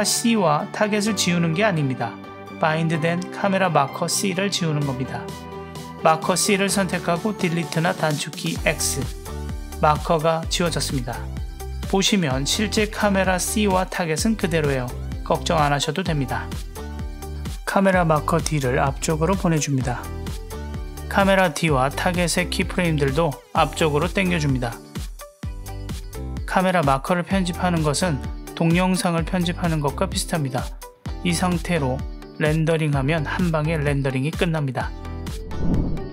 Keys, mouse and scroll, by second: 0.3 click, 0.7 click, 1.1 click, 1.6 click, 2.3 click, 4.0-4.5 drag, 4.8 click, 7.0 x, 13.3 click, 13.8 click, 14.2 click, 14.5 click, 16.2 click, 17.5 click, 18.1 g, 20.6 click, 21.7 click, 23.0 l, 23.8 g, 26.4-30.7 drag, 31.4 click.